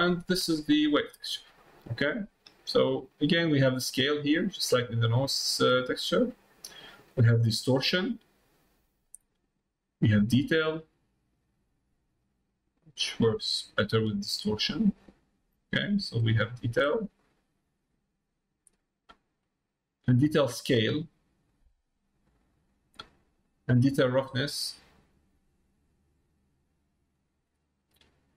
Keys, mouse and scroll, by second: 0.6 click, 1.6 middle click, 2.4 middle click, 3.4-6.6 drag, 7.0-9.4 drag, 10.0-11.8 drag, 12.7-15.0 drag, 16.1-19.0 drag, 20.4-22.5 drag, 23.6-27.5 drag.